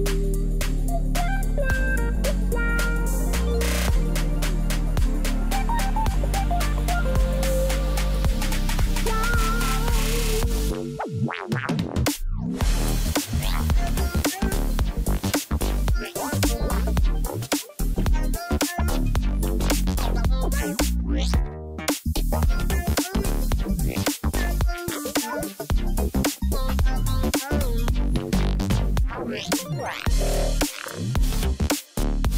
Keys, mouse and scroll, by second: 0.9 double click.